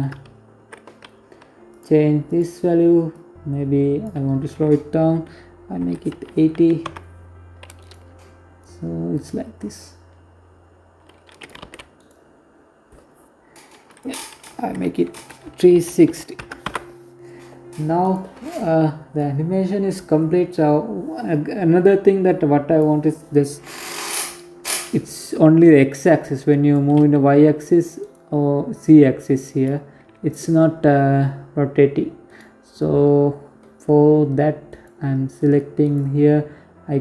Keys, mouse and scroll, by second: 0.2 click, 6.3 right click, 7.1 click, 10.2 ctrl+z, 10.5 right click, 11.4-12.4 scroll down 3, 12.4 click, 16.5 right click, 16.9 right click, 17.6 click, 23.6 click, 25.5 g, 27.3 click, 28.5 g, 33.2 right click, 34.3 right click, 35.2 scroll up 2, 36.2 click.